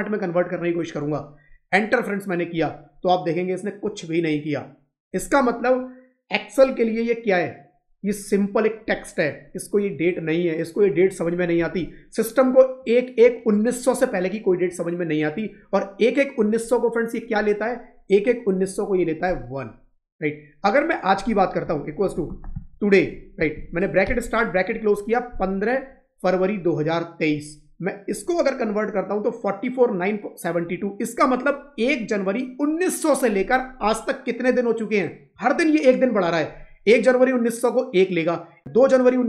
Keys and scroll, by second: 11.5 Left, 24.4 Up.